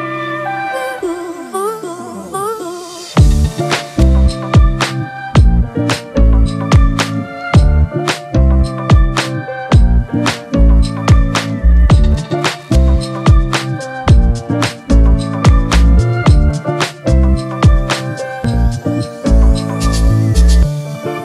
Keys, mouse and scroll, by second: 2.2 ctrl+t, 4.5 alt+shift+click, 15.0 Delete, 17.9 ctrl+t, 20.8 alt+shift+click.